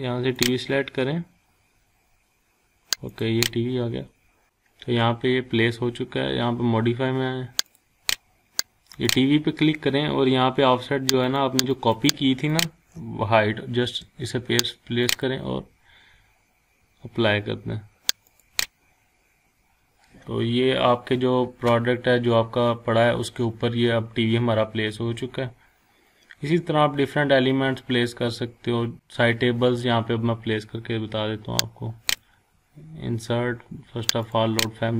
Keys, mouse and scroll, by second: 3.1 click, 7.7 click, 11.2-12.7 drag, 13.6 ctrl+v, 15.0 click, 18.3 click, 19.2 scroll up 1, 20.1 scroll down 1, 20.5 scroll up 1, 22.2 scroll down 1, 27.0 scroll up 1, 27.3-27.7 scroll down 1, 27.8-28.5 scroll up 1, 32.1 click.